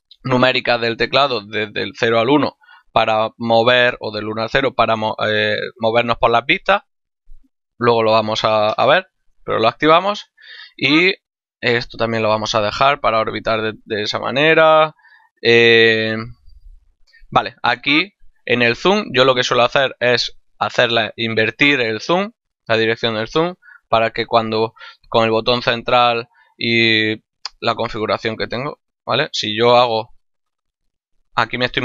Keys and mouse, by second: 10.8 middle click, 12.3 middle click, 13.6 middle click, 15.0 middle click, 16.5 middle click, 18.5 click, 28.5 click, 29.4 middle click, 29.9 shift+middle click.